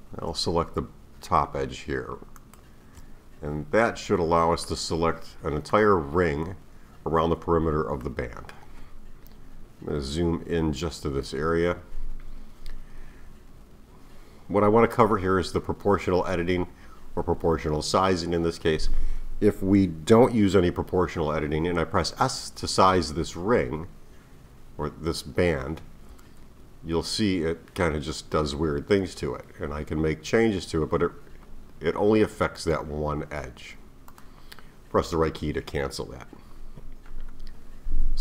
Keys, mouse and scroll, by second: 2.4 alt+shift+click, 4.1-4.7 scroll down 1, 4.7-7.7 middle drag, 8.0-9.4 middle drag, 9.4-10.4 scroll down 2, 10.4-13.9 scroll up 4, 26.1 s.